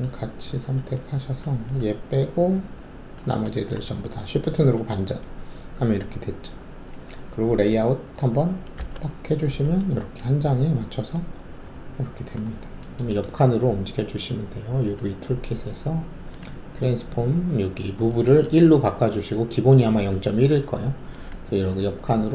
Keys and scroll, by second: 8.7 alt+z.